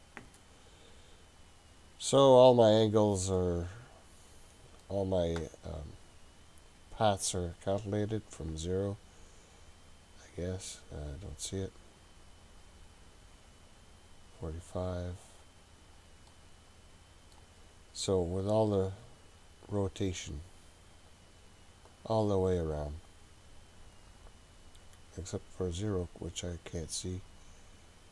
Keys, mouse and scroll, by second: 3.4-4.9 middle drag, 8.5 click, 9.6 click, 13.5 click, 15.4 click, 16.3-17.4 middle drag, 17.4 scroll up 1, 18.5 click, 19.8 click, 20.6 click, 23.1 click, 24.2 click.